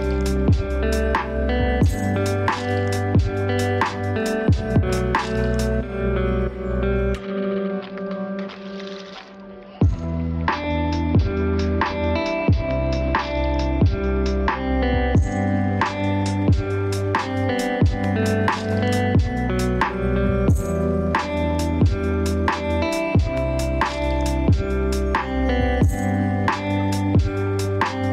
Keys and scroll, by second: 1.8 ctrl+;, 9.1 ctrl+;, 18.2 ctrl+space.